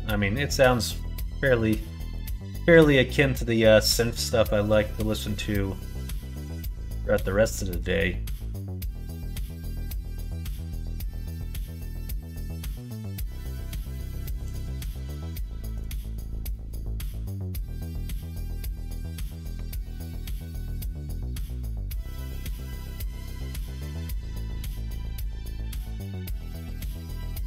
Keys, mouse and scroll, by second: 0.8 middle click, 1.9 middle click, 4.3-14.4 drag, 15.6 click, 15.8 click, 16.4 middle click, 17.7 click, 18.3 click, 18.5 middle click, 19.4 Tab, 19.8 middle click, 21.0 alt+click, 22.7 click, 24.8 2, 25.8 alt+click, 26.5 middle click.